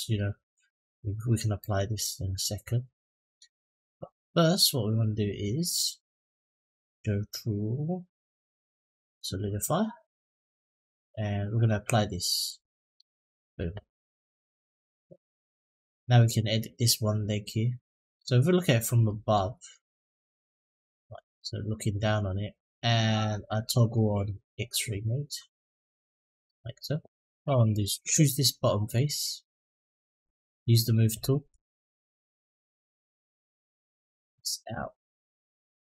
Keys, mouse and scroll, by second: 1.4-3.1 middle drag, 3.6 click, 4.1-4.8 middle drag, 9.2 click, 9.9 middle click, 12.2 click, 13.8 middle click, 15.2 Tab, 16.0 middle click, 18.8 middle click, 19.8 click, 20.9 click, 23.7 click, 25.8 middle click, 27.5 click, 28.7 click, 30.0 click, 31.9 click, 33.4-34.6 drag, 35.2-35.9 drag.